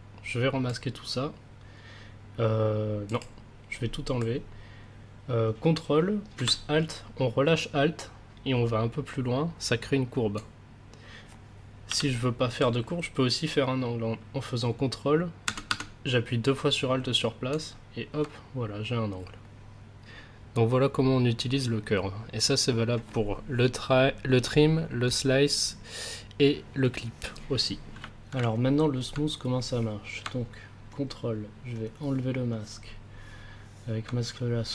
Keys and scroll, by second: 6.3 alt+c, 11.8 ctrl+z, 15.6 alt+c.